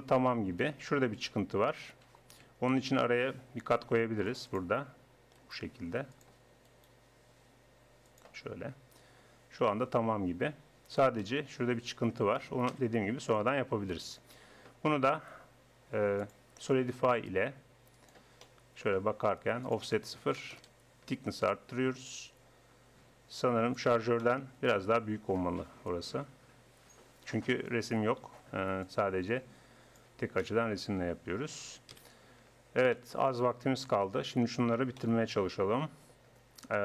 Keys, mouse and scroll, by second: 2.8 ctrl+r, 5.4-6.8 drag, 6.8 right click, 10.4 Tab, 10.8 Tab, 12.7 KP_1, 14.3 Tab, 18.2 middle click, 19.6-21.3 drag, 21.5 middle click, 22.1-23.9 drag, 23.9 middle click, 24.2-26.0 middle drag, 28.8-30.6 drag, 30.4 middle click, 30.9 Tab, 31.3 Tab, 31.9 KP_1, 35.6 click.